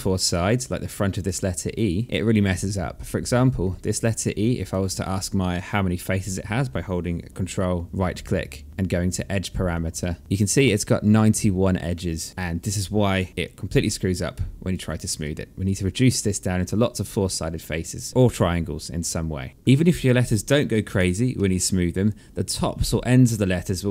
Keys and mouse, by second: 2.6 alt+click, 3.5 ctrl+right click, 10.7 alt+click, 12.3 3, 14.0 1, 19.4 alt+middle click, 19.5 alt+click, 19.9 3, 20.2 alt+middle click, 22.9 alt+click, 23.3 alt+middle click.